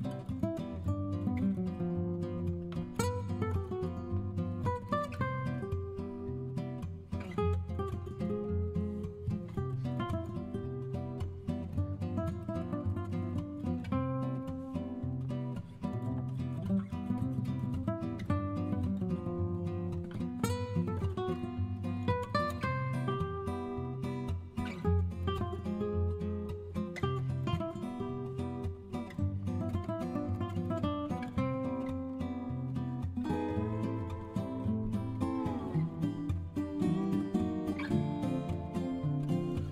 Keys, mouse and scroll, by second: 8.3-9.9 right drag, 11.3 Tab, 22.0 Return, 29.1-32.1 drag, 32.8 right click, 35.2-36.8 right drag, 38.3 Return.